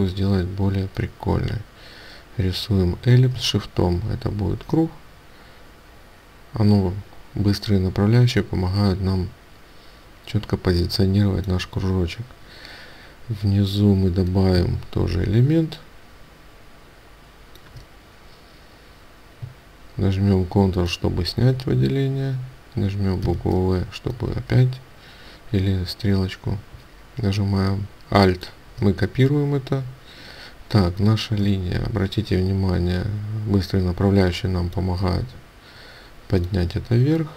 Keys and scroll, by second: 36.8 ctrl+space.